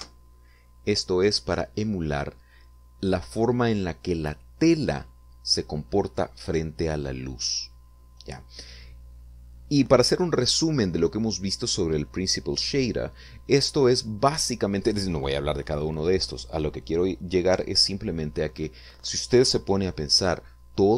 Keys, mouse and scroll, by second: 1.0 Return.